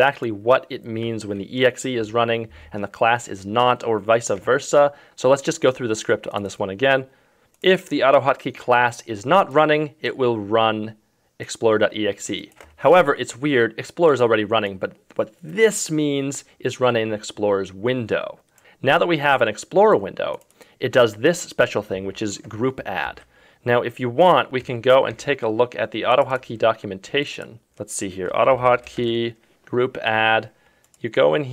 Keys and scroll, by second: 24.5 ctrl+c, 24.6 F4, 25.2 F2.